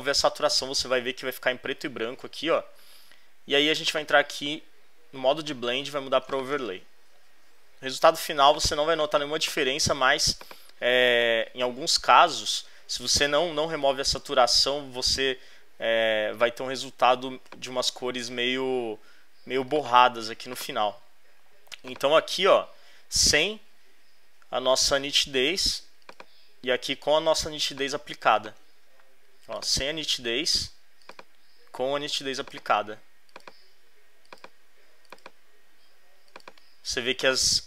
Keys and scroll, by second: 8.1 z, 16.1 space, 27.5 space.